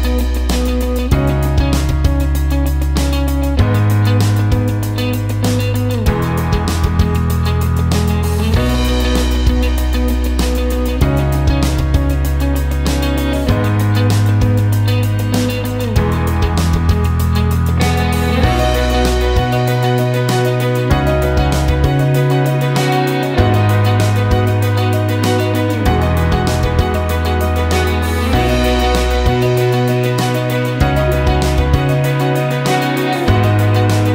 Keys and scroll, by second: 19.9 ctrl+shift+q, 22.1 ctrl+shift+g, 31.5-32.2 typing.